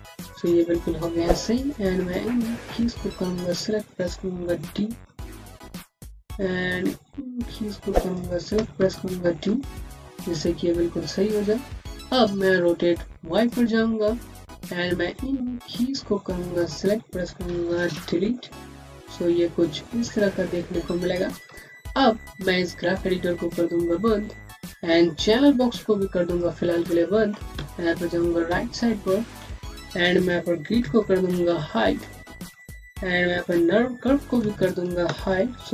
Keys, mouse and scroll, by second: 0.1 alt+middle click, 0.4 scroll down 1, 1.3 click, 4.9-5.4 typing, 5.8-6.4 scroll up 1, 6.4-7.2 scroll down 1, 7.2 click, 8.4-8.8 typing, 9.4 click, 13.2 click, 13.7-14.5 scroll down 1, 14.5 click, 18.1 Delete, 23.2 Delete, 23.4 click, 26.1 click, 27.5 space, 27.7 click, 28.0 space, 28.9 scroll down 1, 30.7-31.2 scroll down 1, 31.2-31.7 typing, 34.3 typing.